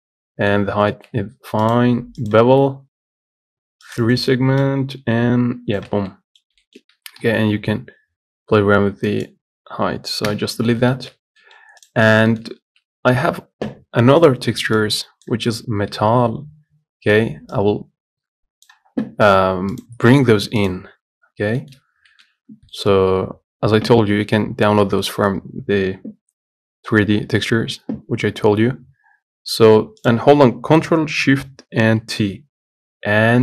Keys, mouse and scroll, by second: 0.9 scroll up 1, 2.5-6.3 drag, 6.3 middle click, 6.6 scroll up 1, 6.8 shift+middle click, 7.2 s, 10.5 Delete, 11.2 shift+middle click, 12.1 click, 12.3 scroll down 1, 12.5 shift+middle click, 12.7 scroll up 1, 30.3 click, 32.3 ctrl+shift+t.